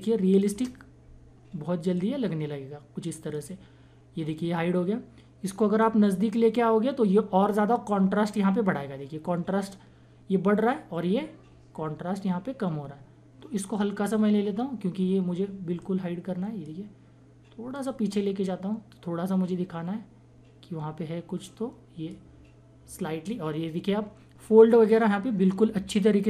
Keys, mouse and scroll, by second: 1.9-5.8 drag, 5.8-24.6 drag.